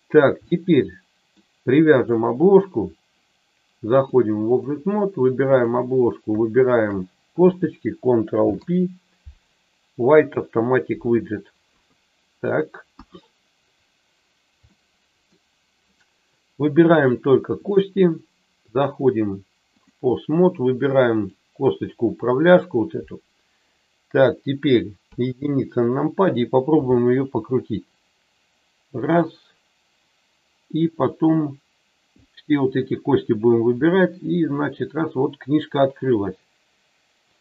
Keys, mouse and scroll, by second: 0.5 middle click, 2.0 click, 4.0 click, 8.3 ctrl+p, 11.6 KP_3, 12.8 KP_1, 14.7 middle click, 16.8 click, 17.5 click, 18.7-19.9 drag, 21.1 click, 25.1 KP_1, 26.7 r, 29.0 click, 32.2 click, 33.7 r, 37.3 click.